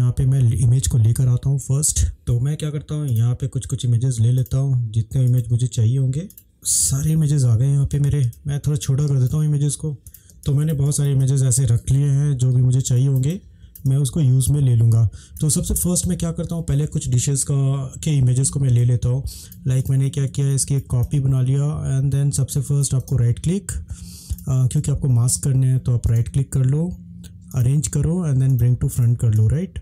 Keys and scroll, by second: 2.1 ctrl+-, 6.9 ctrl+-, 7.1 ctrl+-, 7.2 ctrl+-, 7.3 ctrl+-, 7.6 ctrl+-, 8.3 ctrl+space, 10.2 ctrl+=, 10.3 ctrl+space, 11.9 ctrl+space, 12.1 ctrl+-, 12.9 ctrl+space.